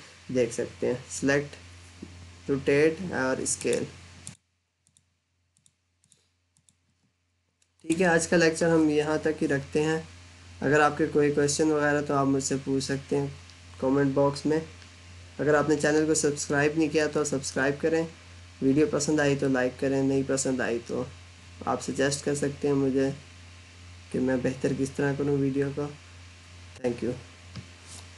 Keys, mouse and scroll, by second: 3.4 click.